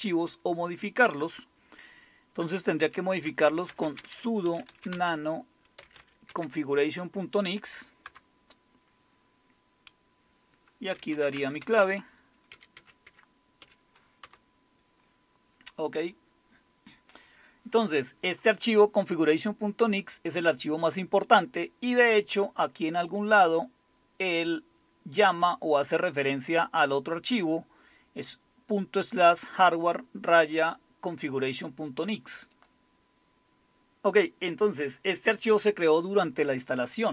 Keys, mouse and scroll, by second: 2.9-6.4 typing, 8.1 Return, 10.7-13.6 typing, 14.2 Return, 23.5-24.0 scroll down 1, 24.0-24.7 scroll down 1, 24.7-25.0 scroll down 1, 26.6-28.9 drag, 32.4 click, 33.0 scroll down 2.